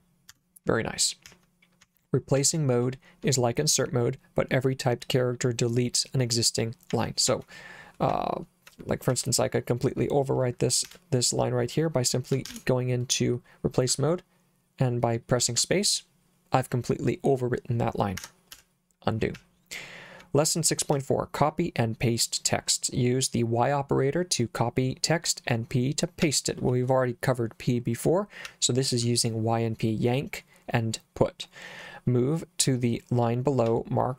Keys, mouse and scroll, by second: 0.3 Escape, 1.3 k, 1.8 k, 2.4 k, 6.9 k, 7.3 k, 8.1 j, 9.1 j, 10.9 0, 12.5 shift+r, 13.9 space, 18.2 Escape, 18.6 u, 19.4 j, 21.0 j, 26.3 j, 28.5 j, 33.7 j.